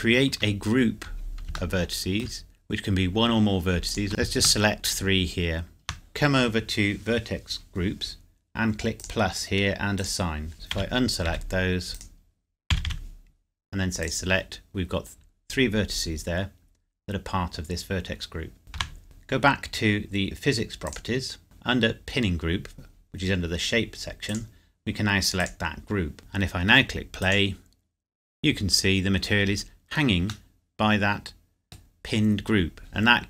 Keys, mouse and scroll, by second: 1.8 shift+middle click, 2.5 scroll up 1, 3.9 alt+click, 4.4 shift+click, 9.0 click, 10.8 a, 11.3 s, 11.9 right click, 12.7 a, 12.8 a, 14.0 click, 18.8 Tab, 20.8 click, 21.4-22.9 scroll up 1, 24.3 click, 26.2-27.0 scroll down 1, 27.0-27.6 scroll up 1, 30.5 middle click.